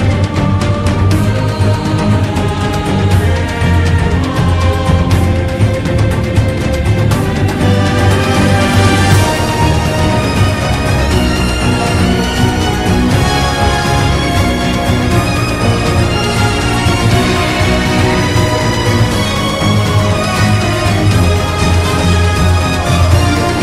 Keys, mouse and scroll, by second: 0.2 ctrl+z, 1.2 ctrl+-, 2.1 ctrl+z, 3.2 ctrl+-, 3.3 ctrl+z, 4.2 ctrl+z, 4.7 ctrl+z, 6.7 ctrl+z, 7.2 ctrl+z, 7.8 ctrl+z, 8.8 ctrl+z, 9.7 ctrl+z, 11.2 ctrl+z, 13.0 ctrl+z, 13.6 ctrl+=, 14.4 ctrl+z, 14.9 ctrl+-, 15.5 ctrl+=, 16.6 ctrl+z, 17.4 ctrl+z, 18.1 ctrl+z, 18.6 ctrl+z, 19.4 ctrl+z, 20.1 ctrl+-, 20.5 ctrl+=, 23.3 ctrl+z.